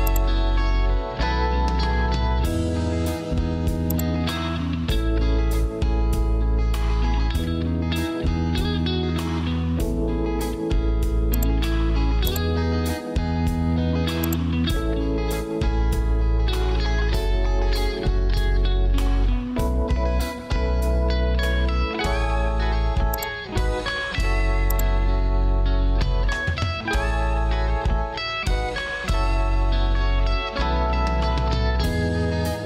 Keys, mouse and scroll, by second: 19.0 Return, 25.4 ctrl+q.